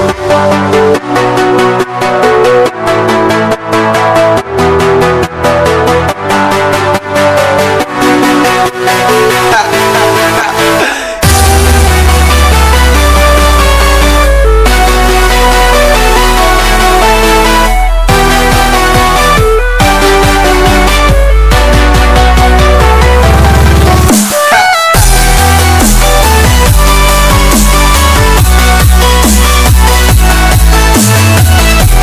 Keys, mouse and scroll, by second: 0.6 click, 4.7 click, 7.5 click, 13.9 click, 17.6-22.6 drag, 31.6 click.